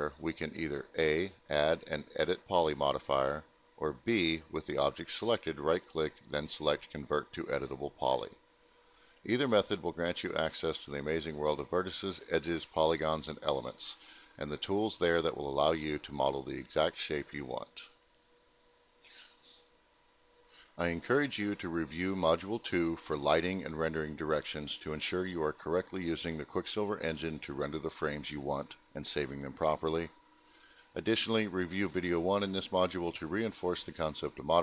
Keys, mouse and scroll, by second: 0.9 click, 1.2 right click, 1.3 double right click, 3.7 click, 4.2 click, 5.6 alt+middle click, 6.8 alt+middle click, 7.1 middle click, 7.2 scroll, 7.7 middle click, 9.9 click, 11.5 alt+middle click, 12.1 middle click, 13.6 click, 20.9 alt+F10.